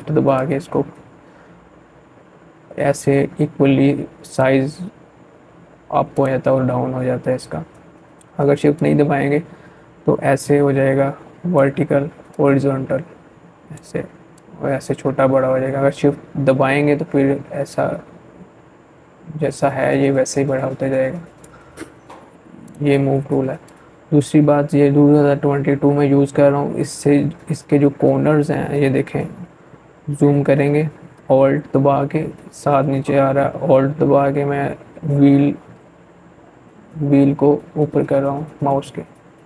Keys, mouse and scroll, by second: 6.6-24.4 drag, 27.3 click, 27.5-28.2 scroll up 1, 28.4-29.8 alt+scroll up 1, 32.0 scroll up 1, 38.4 scroll up 1, 38.9-39.4 scroll down 1.